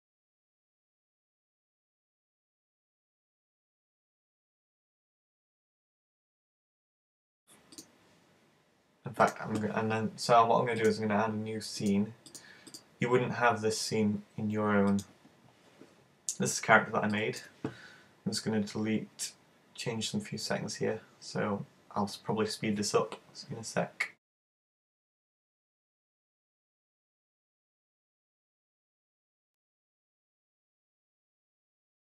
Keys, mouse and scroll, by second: 7.4 click, 7.8 click, 9.3 click, 10.9 click, 12.7 click.